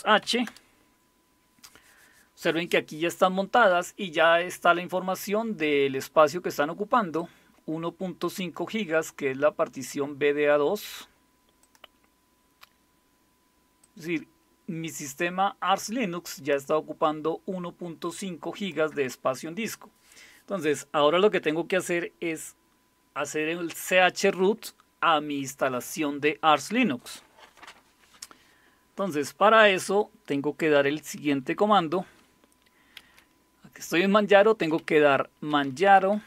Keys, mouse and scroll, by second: 0.0-0.2 typing, 0.5 Return, 7.2-8.6 drag, 11.6 click, 13.8-16.6 drag, 18.6 click, 33.0 typing, 34.4-36.2 typing.